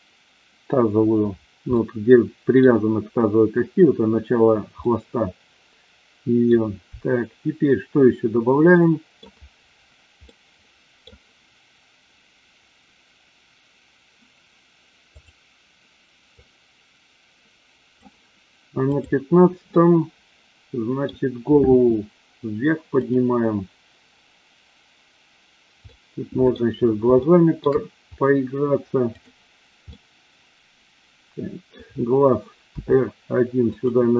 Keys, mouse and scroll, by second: 1.6-2.6 middle drag, 4.9-6.4 middle drag, 8.8 middle click, 10.3 middle click, 15.2 click, 16.3-17.9 drag, 18.9 click, 19.6-21.0 middle drag, 21.6 r, 25.9-26.5 middle drag, 27.3-27.7 shift+middle drag, 29.2 drag, 29.9-31.7 middle drag, 32.7 r, 33.7 click.